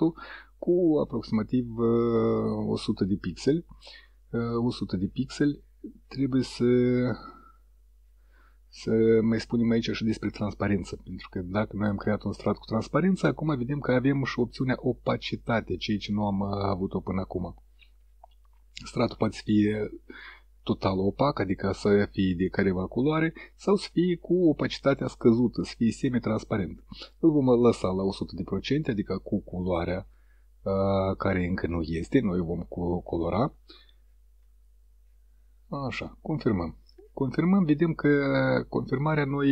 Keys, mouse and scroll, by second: 0.3 click, 1.2 click, 3.8 click, 36.9 click.